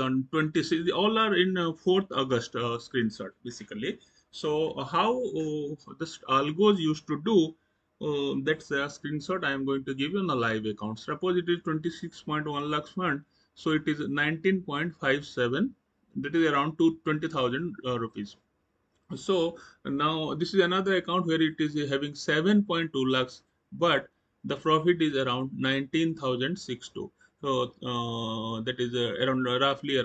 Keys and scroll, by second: 17.3 Right.